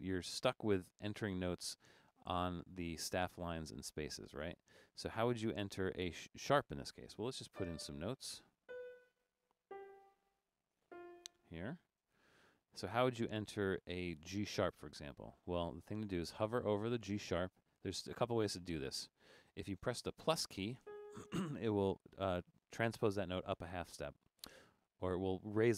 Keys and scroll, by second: 0.1 Down, 0.5 Up, 0.7 Down, 0.9 Down, 1.1 Down, 1.5 Up, 1.7 Up, 1.9 Up, 2.0 Up, 2.3 Down, 2.6 Up, 2.8 Up, 2.9 Up, 3.2 Up, 3.4 Up, 3.7 Down, 3.9 Down, 4.1 Down, 4.3 Down, 4.6 Up, 4.8 Up, 5.0 Up, 5.4 Down, 7.6 5, 8.1 Down, 8.3 Down, 8.6 5, 9.0 Down, 9.2 Down, 9.7 5, 10.0 Down, 10.2 Down, 10.6 Up, 10.9-12.5 typing, 15.4 Left, 15.8 Right.